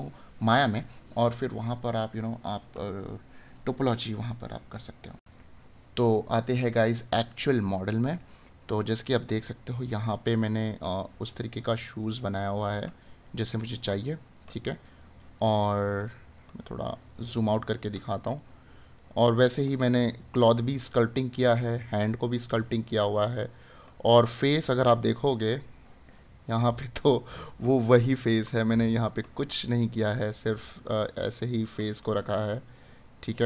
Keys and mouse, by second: 1.5 right click.